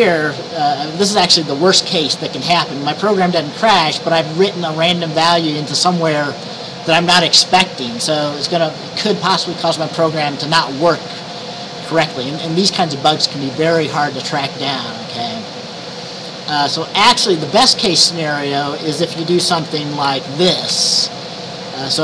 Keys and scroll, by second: 19.5-20.2 typing, 20.7 Down, 20.8 Right, 21.3 Right, 21.5-22.0 Right.